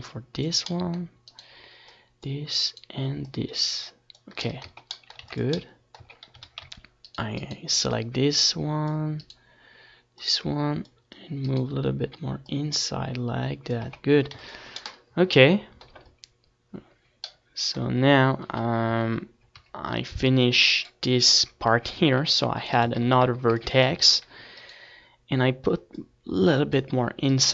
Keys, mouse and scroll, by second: 2.4 right click, 3.3 middle click, 4.8 click, 4.8 middle click, 4.8 right click, 6.2-8.3 drag, 6.2-7.6 middle drag, 6.2-7.6 right drag, 9.9 click, 13.3-14.4 drag, 13.4 middle click, 13.4 right click, 13.6 Tab, 14.1 ctrl+s, 14.9 Tab, 15.2 a, 15.4 c, 15.7 click, 15.7 middle click, 15.7 right click, 16.5 click, 18.3-22.1 right drag, 18.6 click, 19.8 click, 20.0 middle click, 20.7-22.0 drag, 20.7-22.0 middle drag, 22.1 Tab, 22.1 click, 22.5 ctrl+s, 22.8 middle click, 26.2 KP_7, 26.7 Tab, 27.3 a.